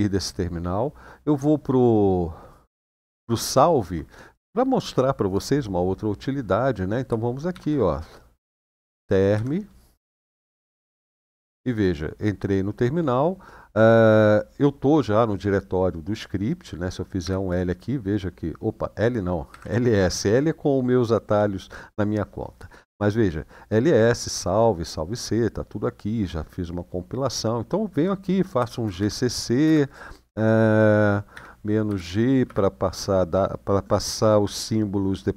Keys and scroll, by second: 2.4 ctrl+Page_Down, 7.3-10.4 typing, 10.7 Return, 17.0 l, 17.2 Return, 19.2-19.7 typing, 28.4-29.4 typing, 31.1-32.2 typing.